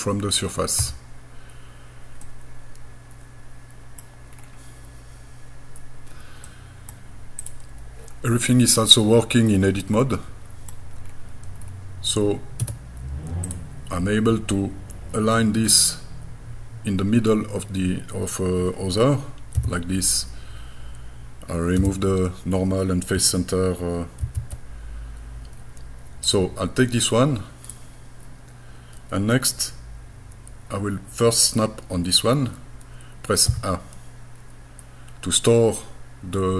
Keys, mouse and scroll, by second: 0.8 KP_Enter, 2.2-4.0 middle drag, 4.4-4.7 scroll down 2, 5.2 scroll down 1, 6.5 middle click, 7.4 click, 8.1-8.6 scroll up 2, 8.8 middle click, 9.8 middle click, 11.1 scroll down 2, 11.6-12.3 scroll up 3, 12.6 Tab, 13.5 click, 19.6 g, 21.8 n, 24.3 shift+f, 26.3-27.7 drag, 33.5 a.